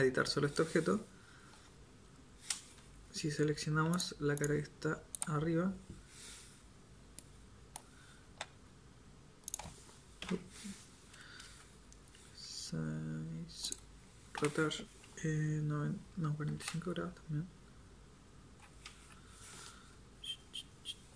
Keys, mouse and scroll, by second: 1.5 i, 8.1 i, 10.2 KP_7, 12.5 s, 14.4 r.